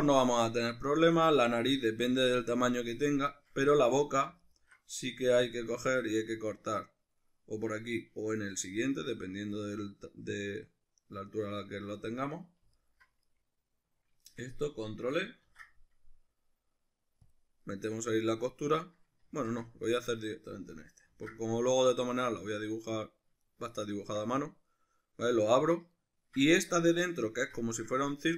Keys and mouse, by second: 4.5 alt+right click, 5.5 KP_Decimal, 5.7-12.7 middle drag, 12.7 alt+right click, 13.2-19.9 middle drag, 15.4 ctrl+e, 19.3 ctrl+z, 19.9 alt+right click, 21.1 ctrl+e, 23.1-26.3 middle drag, 26.5-28.3 middle drag.